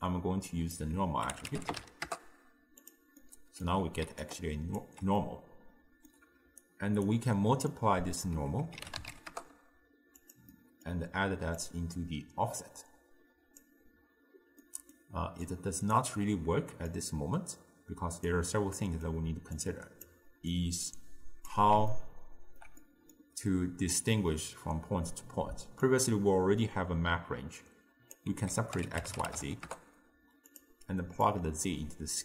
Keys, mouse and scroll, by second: 0.0 click, 3.3 middle click, 4.1 d, 4.3 click, 4.8 d, 4.9 d, 5.2-6.6 middle drag, 6.6 d, 6.7 right click, 7.1 d, 7.2 d, 7.7 click, 10.6-11.6 middle drag, 11.6 drag, 14.6-15.5 middle drag, 15.5 click, 17.0 click, 18.5-19.6 middle drag, 19.6 click, 20.6 click, 21.9-25.9 ctrl+middle drag, 25.9 drag, 31.3 drag.